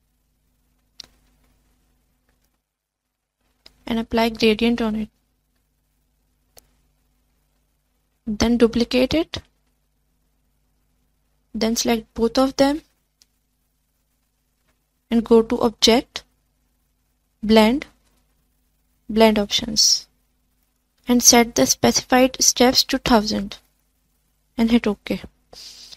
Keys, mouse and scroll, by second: 18.8-25.9 drag.